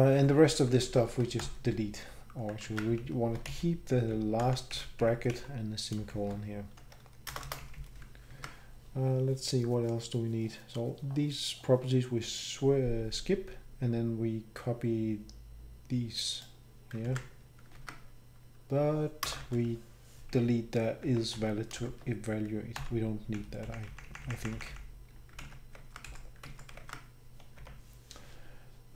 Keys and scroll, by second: 0.3 shift+Down, 0.5 shift+Down, 0.6 shift+Down, 0.7 shift+Down, 0.9 shift+Down, 1.0 shift+Down, 1.4 Delete, 2.6 ctrl+z, 3.5 Delete, 4.4 shift+Up, 5.3 shift+Up, 6.9 shift+Left, 7.3 shift+Left, 7.4 shift+Left, 8.3 shift+Left, 8.3 ctrl+Tab, 13.3 shift+Up, 17.0 ctrl+c, 17.7 ctrl+Tab, 19.2 Return, 19.4 ctrl+v, 21.0 Home, 21.9 Home, 22.8 Delete, 23.4 Down, 24.1 Up, 25.0 Up, 25.8 ctrl+Right, 25.8 shift+Tab, 26.1 shift+Down, 26.4 shift+Right, 26.8 shift+Tab, 27.6 shift+Home.